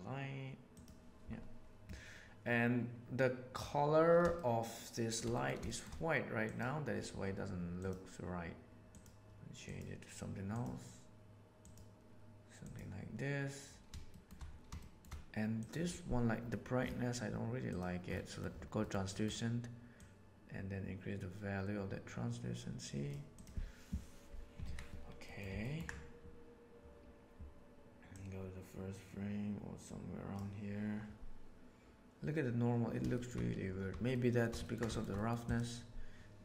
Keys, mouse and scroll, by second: 4.3-5.1 shift+middle drag, 5.2 middle drag, 5.6 shift+middle click, 6.3 click, 14.0 shift+middle drag, 14.7 shift+middle drag, 15.5 click, 17.6 click, 18.3 middle click, 18.7 middle click, 19.1 middle click, 19.9-23.1 drag, 24.5 alt+a, 25.1 middle click, 25.5 ctrl+middle click, 28.0-30.3 drag, 33.1 shift+middle click, 34.0-34.4 shift+middle drag, 34.5 ctrl+middle click, 34.8 shift+middle click, 35.0 middle click, 35.4 click.